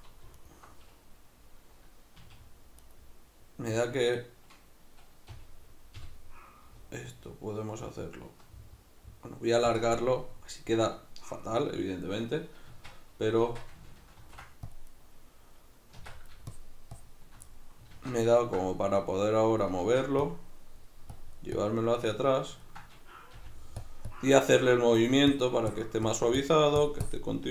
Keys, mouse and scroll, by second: 0.3-2.1 alt+right drag, 2.1 s, 2.9 right click, 5.3 g, 9.8 alt+click, 10.0-15.0 middle drag, 12.7 Tab, 14.2 ctrl+r, 15.0 right click, 16.0 Tab, 16.5-17.5 shift+drag, 17.5-19.0 middle drag, 18.0 alt+q, 19.0-22.6 drag, 19.8 ctrl+z, 22.6-23.9 ctrl+middle drag, 23.4 f, 23.9 click, 25.4-27.5 shift+drag.